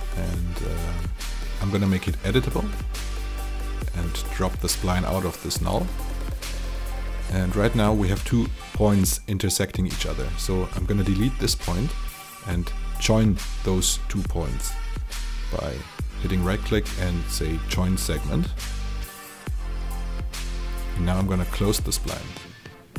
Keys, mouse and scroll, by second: 0.8 click, 5.4 Delete, 5.7-10.9 drag, 11.4 Delete, 12.3 click, 13.1 shift+click, 14.1 right click, 17.4 click, 22.2 alt+click.